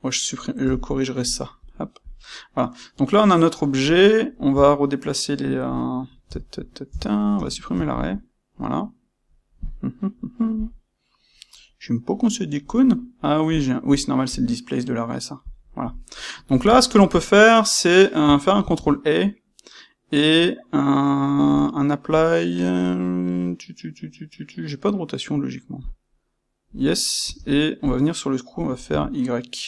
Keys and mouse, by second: 1.5 click, 2.0 click, 2.6-10.5 middle drag, 4.5 Tab, 6.8 Tab, 7.3 space, 10.5 click, 13.4 click, 13.8 click, 14.2 click, 15.4 click, 16.2-29.6 middle drag, 18.6 ctrl+a, 27.8 space.